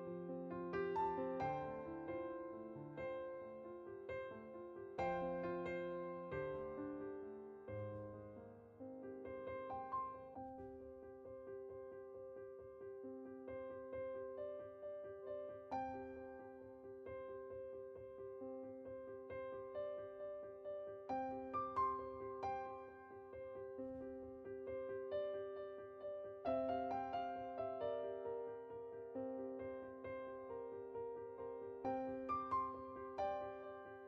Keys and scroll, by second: 2.2-3.1 typing.